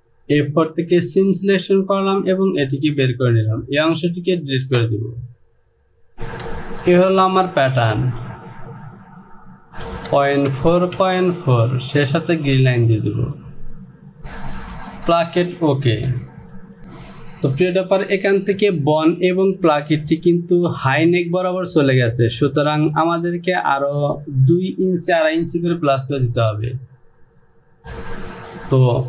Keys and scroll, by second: 6.4 Home, 10.0 Down, 10.5 Down, 11.0 Down, 16.6 j.